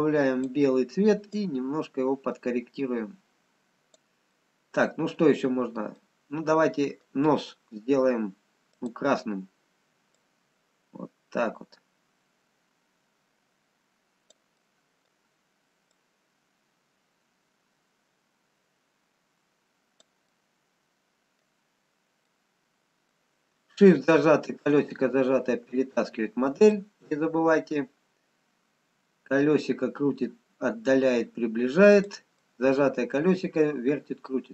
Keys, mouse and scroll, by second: 1.3 click, 4.3 middle click, 6.7 middle click, 6.7 scroll down 2, 8.8 click, 14.6 middle click, 16.1 click, 20.3 middle click, 21.8-22.8 scroll down 2, 24.1 shift+middle click, 25.7-27.1 scroll up 3, 27.1 click, 32.6 middle click.